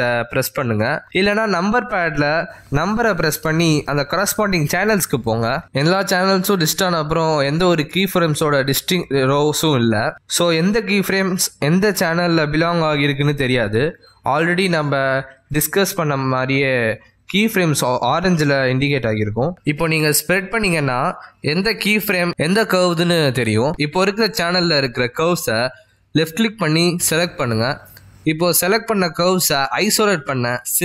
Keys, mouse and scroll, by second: 1.1 click, 1.6 click, 2.1 click, 11.3 a, 12.5-13.7 scroll down 2, 13.7 middle click, 13.7 scroll down 2, 23.1 click, 24.0 click, 25.2 click, 26.4 click, 27.1 click, 28.4 click.